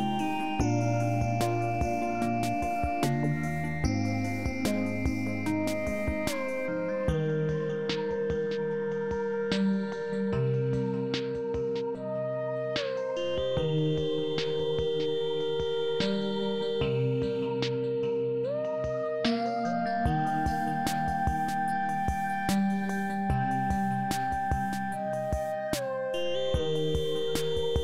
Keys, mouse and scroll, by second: 0.9 shift+s, 5.0 shift+s, 6.5 shift+s, 8.2 shift+s, 9.3 shift+s, 11.9 shift+s, 13.9 shift+s, 15.0 shift+s, 18.2 shift+s, 19.8 shift+s, 23.5 shift+s, 24.7 shift+s, 26.2 shift+s.